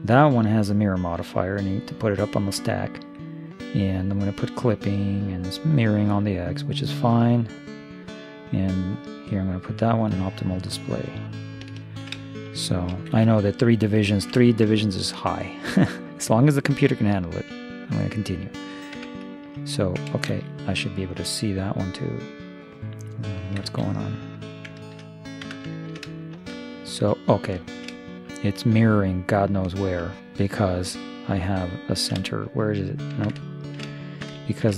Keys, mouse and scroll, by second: 1.8-6.0 drag, 9.1-12.7 drag, 12.0-14.1 middle drag, 13.2 shift+space, 14.3 middle click, 17.1-19.0 middle drag, 19.0 Tab, 20.3 shift+space, 21.4-23.3 drag, 23.6 shift+space, 25.4 Tab.